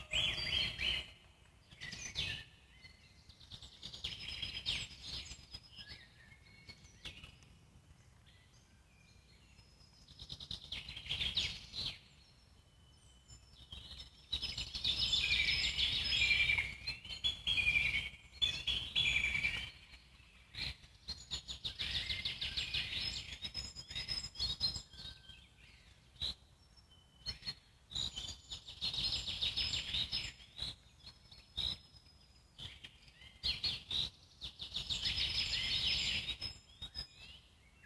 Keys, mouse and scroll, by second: 1.9 click, 2.7 click, 3.4-4.5 alt+middle drag, 4.5 m, 5.7 click, 6.3-7.3 alt+middle drag, 7.3 m, 8.7 click, 9.1 click, 10.0 g, 10.7 click, 11.0 g, 12.0 click, 13.1 click, 13.4 g, 15.5 scroll down 1, 15.9-17.1 alt+middle drag, 17.1-17.4 scroll down 2, 17.4-19.8 alt+middle drag, 19.8 scroll up 2, 21.2 Tab, 21.9 scroll up 1, 22.1 z, 22.4 click, 23.3 middle click, 23.9 shift+click, 24.3 alt+middle click, 24.6 z, 25.1-26.2 alt+middle drag, 26.2 m, 28.3-32.1 drag, 32.2-33.3 alt+middle drag, 33.3-33.6 scroll up 1, 33.6-34.7 alt+middle drag, 34.7-36.8 shift+drag.